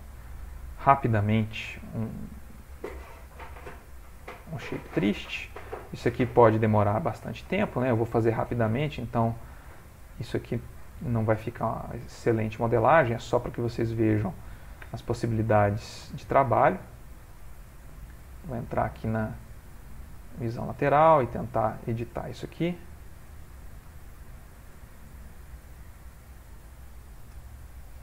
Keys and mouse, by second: 0.9 click, 2.4 shift+click, 2.9 g, 4.8 click, 5.3 shift+click, 5.7 g, 8.0 click, 8.5 g, 10.3 alt+click, 15.1 1, 15.7 click, 16.7 shift+click, 18.3 click, 20.1 shift+middle click, 21.0 middle click, 23.2 click, 24.1 ctrl+middle click, 25.3 click, 26.1 g.